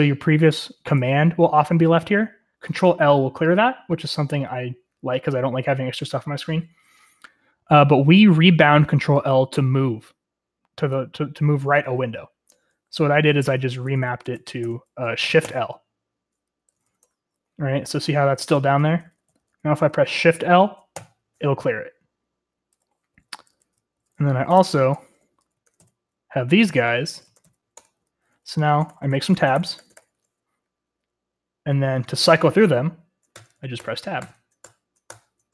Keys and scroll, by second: 13.2-16.8 typing, 16.9 Up, 17.1 Return, 18.2-19.4 typing, 21.0-21.8 typing, 23.2-25.7 typing, 24.6 ctrl+r, 24.6 ctrl+l, 25.0 Return, 25.7 ctrl+r, 25.8 ctrl+l, 27.0-28.8 typing, 28.8 ctrl+w, 28.9 ctrl+t, 29.0 ctrl+w, 29.1 ctrl+t, 29.3 ctrl+w, 29.3 ctrl+t, 29.5 Return, 29.5 ctrl+w, 29.6 ctrl+t, 29.7 ctrl+w, 29.8 ctrl+t, 29.9 ctrl+w, 30.0 ctrl+t, 33.4 Tab, 33.8 Tab, 34.2 Tab, 34.6 Tab, 35.1 Tab.